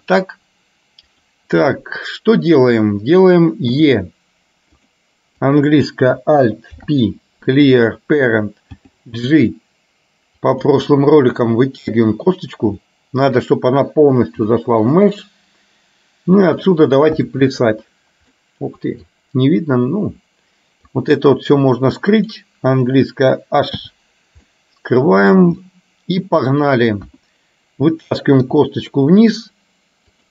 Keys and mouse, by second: 1.2 click, 5.5 click, 6.9 alt+p, 8.7 g, 11.0-12.0 middle drag, 12.9 middle click, 14.5 g, 16.7 click, 17.2 KP_1, 18.4 middle click, 21.0-22.5 drag, 23.9 h, 24.6 middle click, 26.7 click, 27.2 KP_1, 28.5 e.